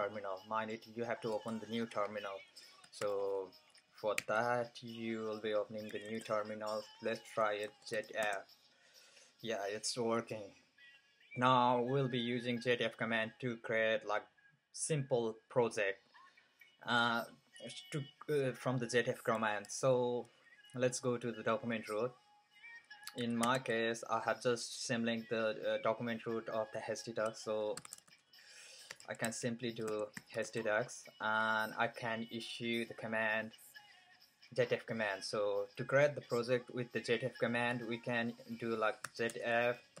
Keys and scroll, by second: 3.8 ctrl+super+t, 4.2 ctrl+super+t, 5.6-8.1 typing, 22.8-23.9 typing, 27.5-30.7 typing, 32.6 typing, 37.3-40.0 typing.